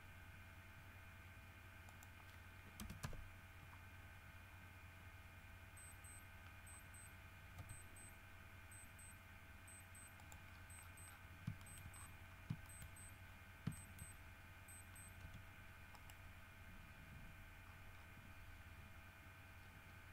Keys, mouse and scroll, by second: 2.1 middle click, 2.9 KP_0, 3.2 KP_Enter, 4.6-5.5 scroll up 4, 6.0-6.5 scroll down 4, 6.5-7.1 scroll up 4, 7.7 r, 10.3 click, 10.7-11.5 scroll down 3, 11.8 shift+middle click, 12.1-13.7 shift+scroll up 6, 12.8 shift+middle click, 13.9 shift+middle click, 14.2 shift+scroll up 2, 15.4 r, 16.1 right click, 17.8-18.4 scroll down 2, 19.1 scroll up 2.